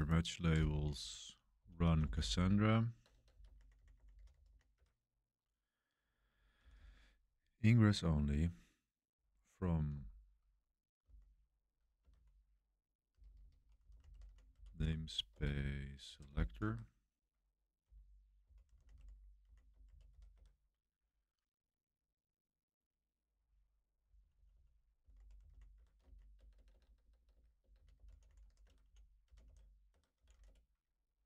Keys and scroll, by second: 0.9-7.0 typing, 9.8-15.5 typing, 16.0 Page_Down, 16.2 Return, 16.6 Home, 17.5-20.5 typing, 23.7-30.3 typing.